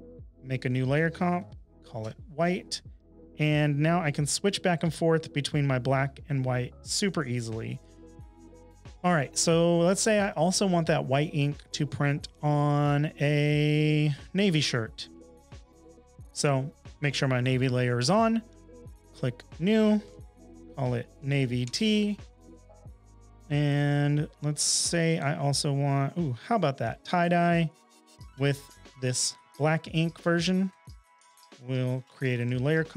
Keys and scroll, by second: 0.7-2.9 typing, 2.0 Return, 19.8-21.9 typing, 31.8-32.9 typing.